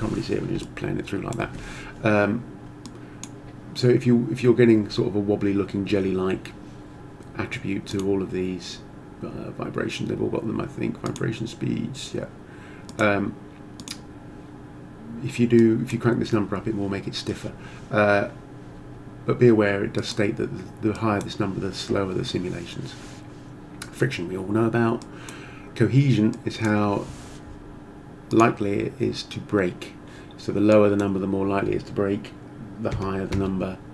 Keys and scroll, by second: 32.9 1, 33.3 Return.